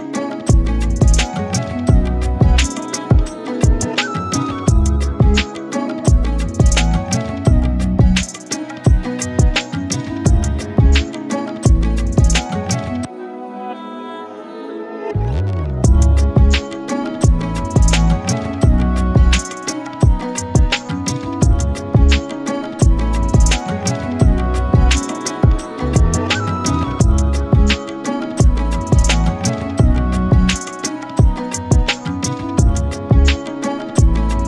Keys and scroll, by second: 0.2 shift+Return, 3.4 shift+Return, 7.5 shift+t, 8.6-14.7 typing, 15.4 ctrl+t, 18.0 alt+Return, 21.3 shift+Return, 26.3 shift+Return, 29.8 shift+Return.